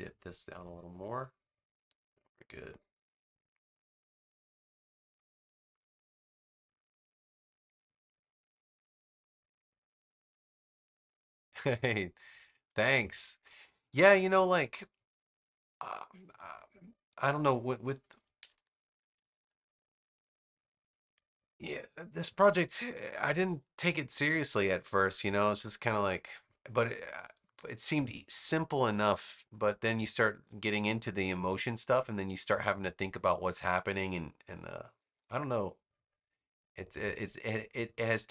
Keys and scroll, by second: 18.3 super+-, 19.0 super+-, 22.2 super+=.